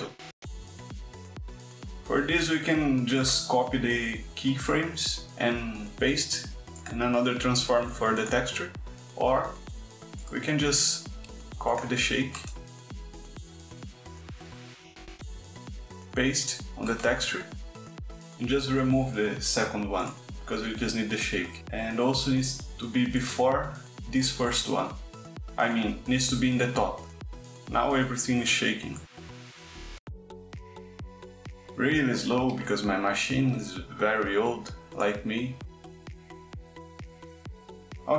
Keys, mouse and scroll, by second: 1.1 click, 3.2 click, 6.1 click, 7.4 click, 10.7 click, 11.7 click, 13.2 click, 14.2 click, 15.6 click, 16.4 click, 18.0 click, 19.9 click, 22.9 click, 23.7 click, 28.2 click, 29.5 click, 30.4 click, 31.0 click, 31.8 space, 36.2 space.